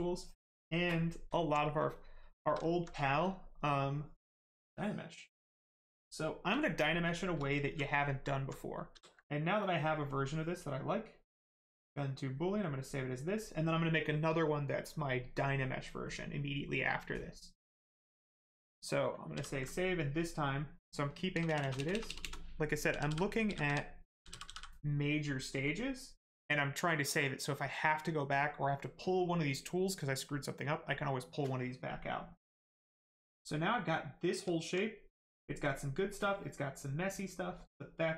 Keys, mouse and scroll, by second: 0.1 click, 1.3 alt+right click, 1.7 shift+right click, 2.7 alt+right click, 3.2 shift+right click, 4.7 click, 7.0 shift+f, 7.6 alt+right click, 8.2 alt+right click, 8.7 ctrl+right click, 11.9 click, 19.3 ctrl+s, 20.3 click, 21.3 BackSpace, 22.9-24.4 typing, 25.6 click, 32.7 right click, 34.7 alt+right click, 35.2 right click, 35.3 right click.